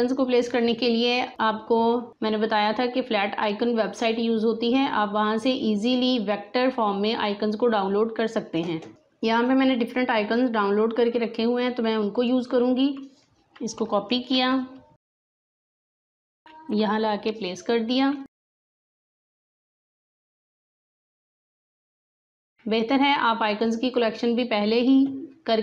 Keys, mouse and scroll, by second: 8.9-13.6 drag, 14.0 ctrl+c, 15.2 click, 16.4 ctrl+v, 18.5-25.6 shift+drag.